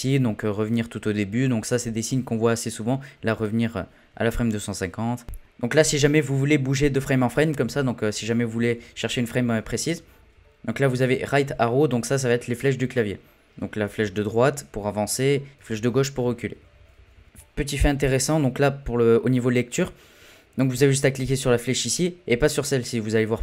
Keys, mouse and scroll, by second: 0.6-5.2 drag, 5.8 Right, 6.1-7.3 Right, 7.5 Right, 7.7 Right, 8.0 Right, 8.2 Right, 8.4 Right, 8.6-9.1 Right, 9.2 Right, 9.4 Right, 9.6 Right, 9.8 Right, 10.0 Right, 10.2 Right, 10.4 Right, 10.7 Right, 10.9 Right, 13.5-14.2 Right, 14.6 Right, 14.8 Right, 15.0 Right, 15.6-16.6 Left, 16.8 Left, 16.9 Left, 17.1 Left.